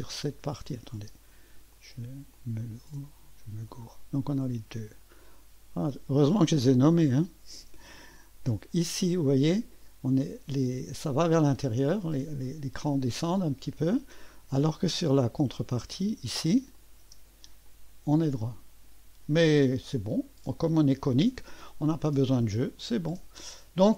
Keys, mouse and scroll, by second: 0.2-1.0 typing, 0.6 click, 1.8 click, 2.2-3.3 drag, 5.9 click, 7.1 click, 7.7 space, 8.9-11.0 drag, 11.5-13.0 drag, 15.5 click, 15.9 space, 16.7 click, 17.1 space, 17.7-20.8 drag, 21.5 space, 22.3-23.9 drag.